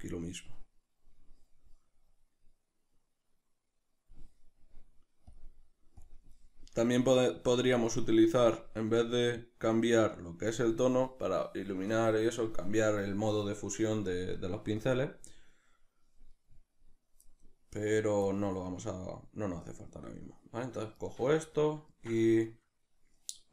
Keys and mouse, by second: 2.1 click, 12.3-23.5 ctrl+middle drag.